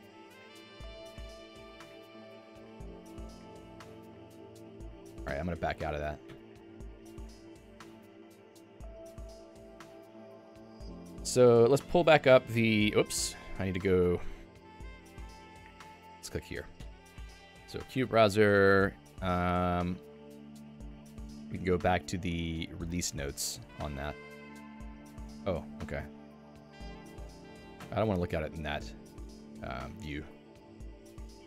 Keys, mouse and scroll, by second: 16.7 click, 18.4 Return.